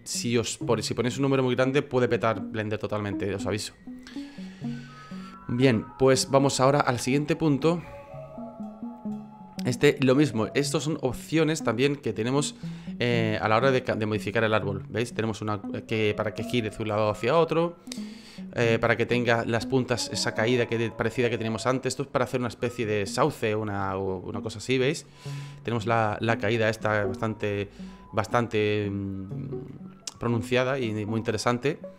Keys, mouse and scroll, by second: 26.9 F9.